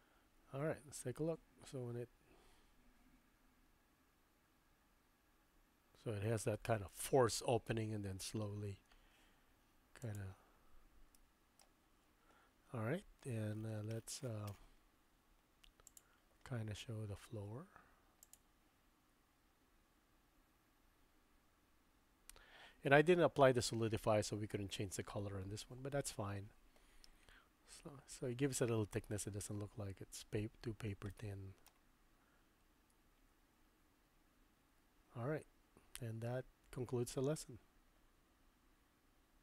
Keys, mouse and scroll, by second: 10.0-11.6 drag, 15.8-16.4 drag, 31.1-31.7 drag.